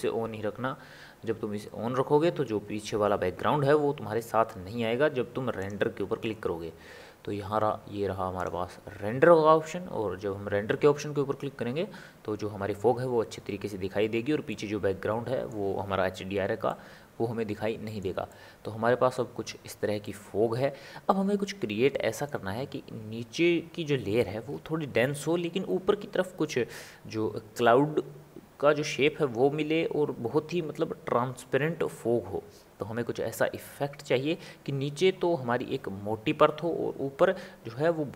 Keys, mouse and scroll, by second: 0.0-0.5 scroll up 1, 0.5-2.8 scroll down 3, 5.6 click, 13.1-14.5 drag, 14.5-38.1 middle drag.